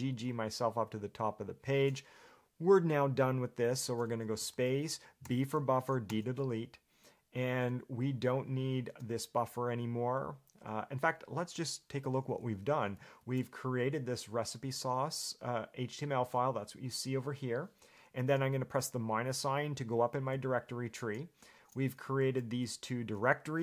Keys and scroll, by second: 13.4 shift+v, 16.2 Escape, 20.5 -, 21.8-23.3 typing.